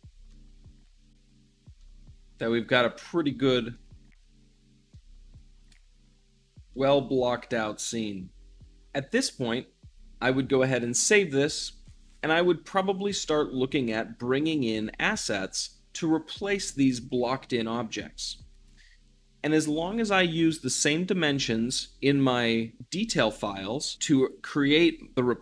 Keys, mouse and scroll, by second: 0.2-3.5 middle drag, 3.5-5.5 drag, 5.5 `, 6.2-25.4 middle drag.